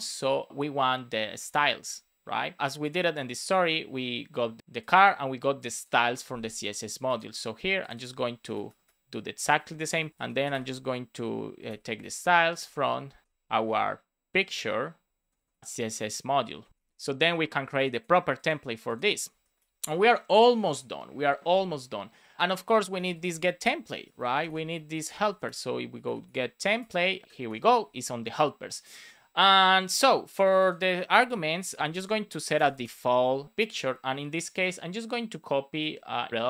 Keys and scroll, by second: 8.3 BackSpace, 9.9 super+Right, 10.1 Return, 10.5 space, 12.0 space, 15.1 Down, 16.4 Down, 16.6 Up, 16.7 super+s, 19.2 Return, 19.5 super+s, 22.8 super+c, 24.4 space, 24.8 shift+[, 25.0 space, 26.0 shift+t, 26.9 Return, 27.2 super+Right, 27.4 Return, 27.8 super+s, 32.1 shift+;, 32.5 space, 32.6 shift+'.